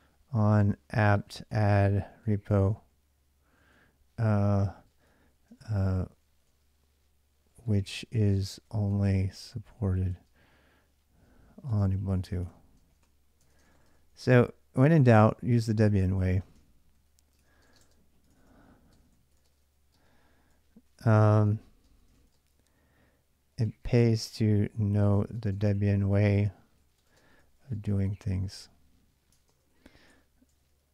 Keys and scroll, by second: 0.0-2.9 typing, 3.4 ctrl+a, 4.2-10.0 typing, 11.3-14.7 typing, 15.8 ctrl+[, 16.0-30.9 typing, 29.9 Return, 30.3 ctrl+[, 30.4 ctrl+j.